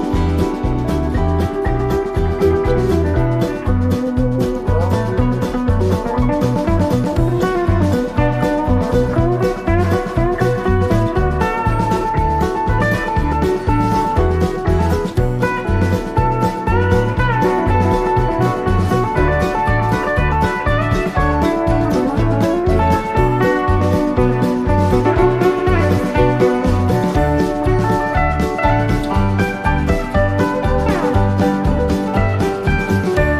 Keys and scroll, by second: 18.9 super+[, 31.7 Left.